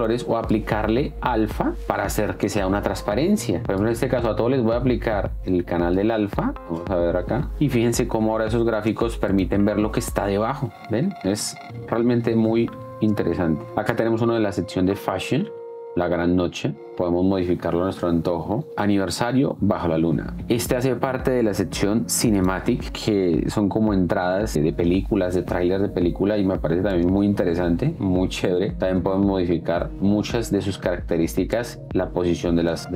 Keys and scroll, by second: 8.6 space, 12.1 Down, 16.9 space, 27.2 space.